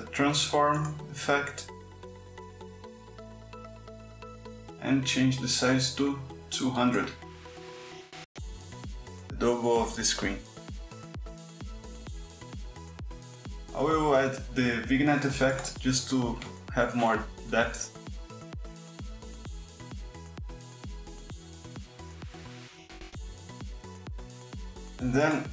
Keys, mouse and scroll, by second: 0.6-1.7 drag, 2.1 click, 3.2 click, 6.2 click, 7.1 KP_2, 7.5 KP_Enter, 10.0 click, 12.6 click, 14.8-15.9 typing, 16.4 click, 19.3-21.0 drag, 21.3-24.1 drag, 24.8 click.